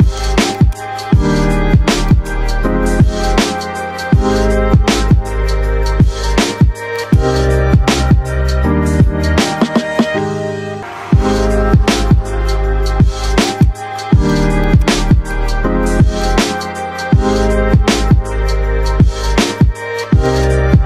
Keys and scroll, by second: 1.5 shift+F2.